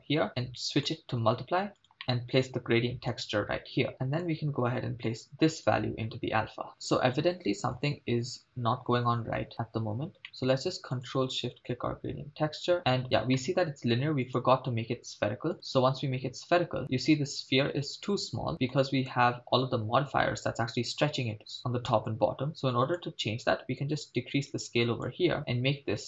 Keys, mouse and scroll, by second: 0.8-1.8 drag, 2.0 middle click, 3.1-3.9 drag, 3.9-4.4 middle drag, 5.7-6.7 drag, 6.7-7.8 shift+middle drag, 10.2 middle click, 11.2 ctrl+shift+click, 13.0 scroll up 3, 13.4 middle click, 14.3-15.5 drag, 18.5 middle click, 23.0-25.2 drag.